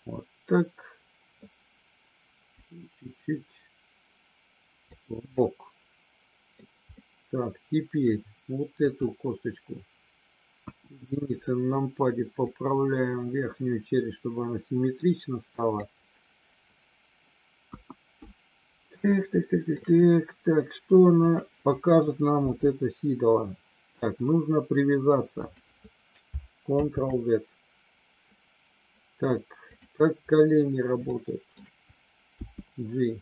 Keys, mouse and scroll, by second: 2.6-4.8 drag, 5.5-6.6 middle drag, 6.8-8.1 middle drag, 8.9 click, 10.6 KP_1, 12.5-15.8 drag, 17.7 KP_1, 19.1 shift+middle click, 21.2 click, 22.3 g, 25.3 click, 26.8 ctrl+z, 29.6 click, 31.1 shift+middle click, 32.3 g.